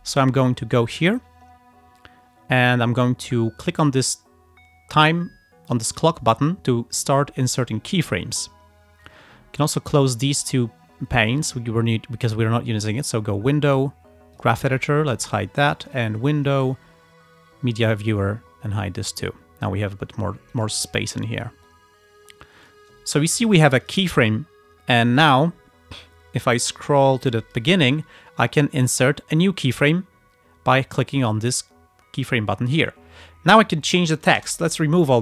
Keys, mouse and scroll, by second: 1.6 scroll down 2, 6.4 click, 7.8 click, 9.8 right click, 13.1 click, 14.4 click, 16.0 click, 17.9 click, 19.3 click, 20.5 click, 20.9 click, 21.7-22.9 drag, 23.9 click, 25.2 click, 26.8-28.0 drag, 31.2 click, 33.7 click, 34.4 BackSpace, 35.1 click.